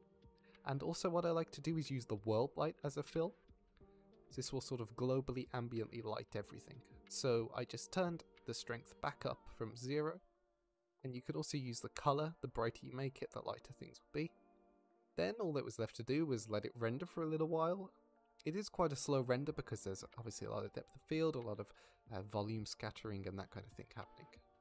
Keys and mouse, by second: 3.7 click, 5.4 click, 6.4 click, 17.3 click, 17.8 drag, 18.2 ctrl+s, 18.5-18.8 drag, 19.0-19.8 drag, 20.4 click.